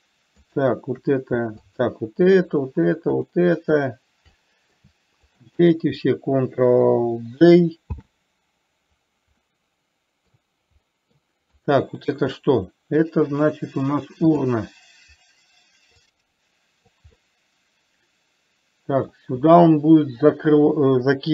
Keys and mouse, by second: 0.7 shift+click, 2.1 click, 3.5 shift+click, 4.7-5.2 middle drag, 5.7 shift+click, 8.4 ctrl+j, 9.7-10.7 middle drag, 11.2-11.6 middle drag, 11.9 click, 12.7-13.4 middle drag, 14.7 click, 16.4 click, 17.5-19.5 middle drag.